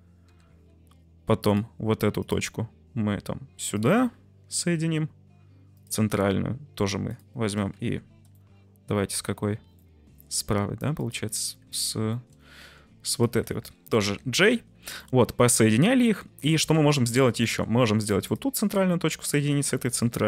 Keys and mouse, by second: 0.2 j, 3.7 shift+click, 4.5 j, 5.7 click, 7.0 click, 7.8 ctrl+z, 8.3 middle click, 9.8 middle click, 10.9 shift+click, 11.7 middle click, 12.1 shift+middle click, 12.6 ctrl+z, 14.0 j, 14.7 Tab, 14.9-15.5 middle drag, 15.5 Tab, 16.5 middle click, 16.7 Tab, 17.3 middle click, 17.4 Tab, 17.7 1, 19.2 shift+click.